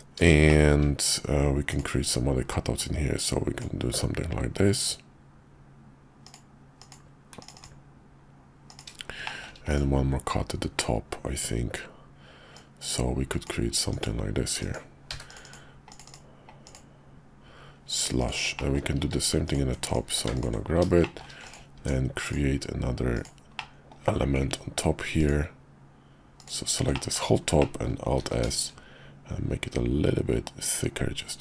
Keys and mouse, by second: 0.5 shift+click, 1.7 click, 2.8 click, 8.7 click, 9.3 shift+middle click, 9.7 click, 12.5 click, 18.2 click, 18.6 middle click, 19.0 q, 19.8 click, 20.0 q, 21.0 shift+middle click, 21.5 click, 21.8 Tab, 22.2 click, 23.1 click, 23.6 middle click, 25.2 ctrl+click, 26.4 ctrl+click, 26.9 middle click, 27.6 middle click, 28.2 alt+s.